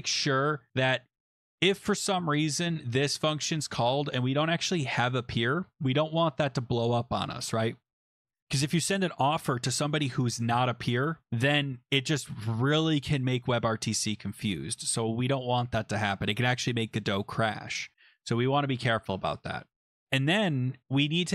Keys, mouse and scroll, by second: 0.0-0.7 typing, 2.2 Return, 2.2-2.9 typing.